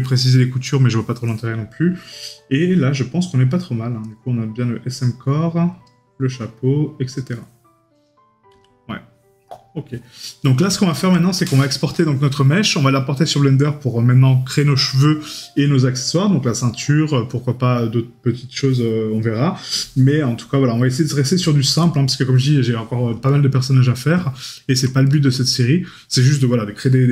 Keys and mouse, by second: 10.3 right click, 24.5 right click.